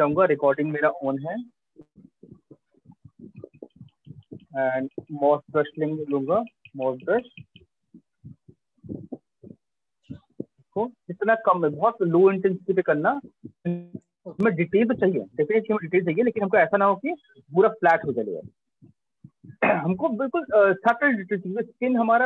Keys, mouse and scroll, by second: 2.4 right click, 3.3 alt+click, 4.6 click, 6.1 click, 6.9-9.1 typing, 10.4 click, 11.1 [, 13.0 click, 14.0 click.